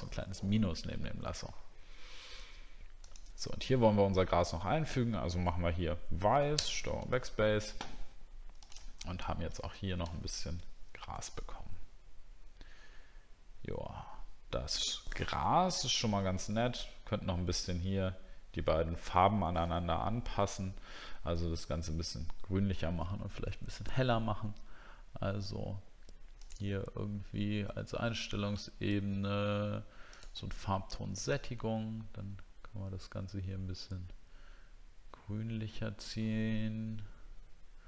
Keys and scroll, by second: 9.8 ctrl+d, 10.2 alt+scroll down 1.